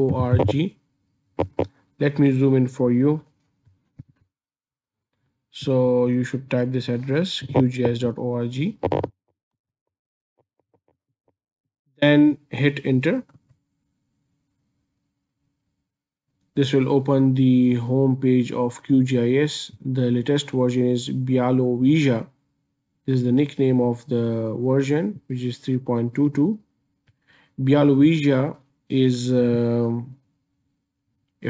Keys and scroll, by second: 0.0-0.8 typing, 4.0 super+=, 9.8 super+Escape, 13.4 Return.